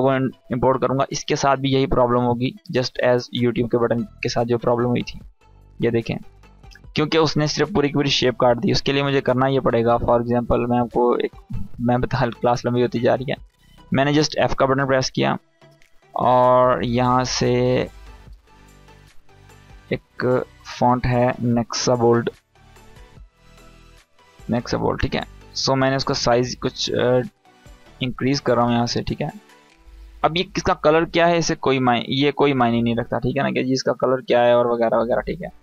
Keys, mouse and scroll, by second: 6.3-7.7 scroll up 1, 7.7 click, 11.2 click, 13.7 f, 14.6 click, 16.5-17.7 typing, 19.1 click, 22.2-23.9 scroll down 1, 24.2-27.9 drag.